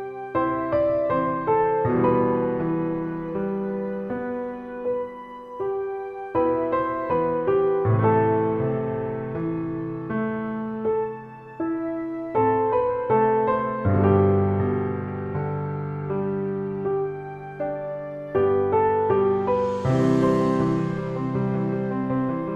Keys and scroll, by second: 1.6 a, 3.8 shift+f, 4.0 a, 6.0 shift+f, 6.0 a, 7.1 e, 8.5 shift+f, 8.6 a, 10.4 shift+f, 10.5 a, 11.5 shift+e, 12.9 shift+f, 13.5 f, 13.7 e, 15.3 shift+f, 15.3 a, 17.8 shift+a, 20.2 e, 21.4-22.5 typing.